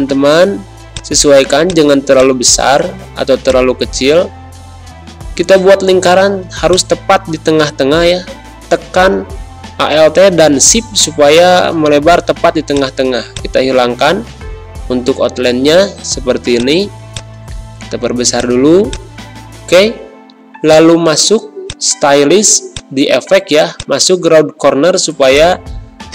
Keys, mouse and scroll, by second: 1.3 z, 1.6 click, 2.0 space, 2.1-10.7 drag, 10.7 d, 12.6 click, 14.1 Pause, 15.3 click, 15.4 space, 16.1 z, 16.5 click, 16.9 space, 17.0 click, 17.5 v, 18.3 click.